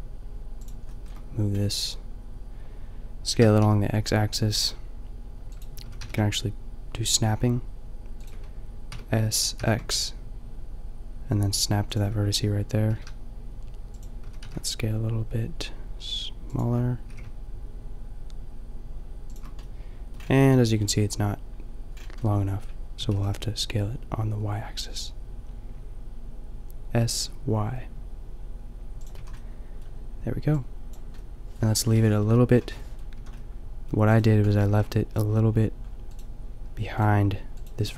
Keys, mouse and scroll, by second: 3.4 s, 5.9 s, 8.9 s, 12.8 g, 13.8 drag, 14.3 s, 17.0 g, 18.9 middle click, 20.3 middle click, 23.0 s, 23.3-26.5 middle drag, 29.2 a, 32.2 KP_5, 33.2 a, 34.6 a, 36.7 g, 37.8 Tab.